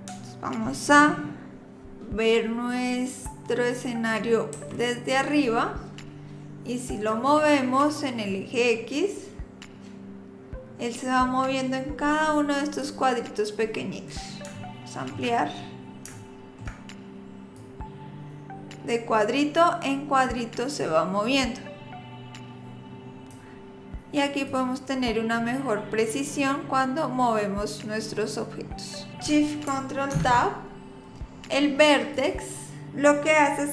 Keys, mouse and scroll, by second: 4.6 KP_7, 8.3 click, 13.2-14.5 scroll up 4, 14.6 shift+middle click, 15.5-15.9 scroll up 2, 16.1 shift+middle click, 17.6 click, 24.5 click, 30.1 ctrl+shift+Tab.